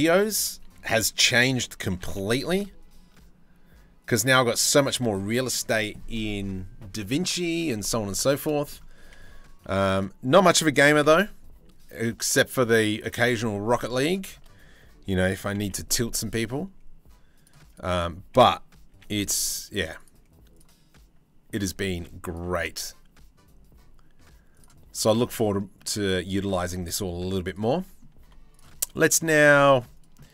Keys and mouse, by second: 0.3 3, 1.5 g, 4.9 click, 7.3 click, 7.8 shift+middle click, 8.0 click, 8.6 1, 9.2 2, 9.5 click, 10.5 g, 13.0 1, 13.5 shift+middle click, 15.0 g, 18.5 g, 20.1-21.2 drag, 21.2 g, 22.1 g, 24.8 middle click, 25.3 middle click, 26.6 ctrl+r, 27.3 middle click, 27.8 2, 29.0 z, 29.3 middle click, 30.2 middle click.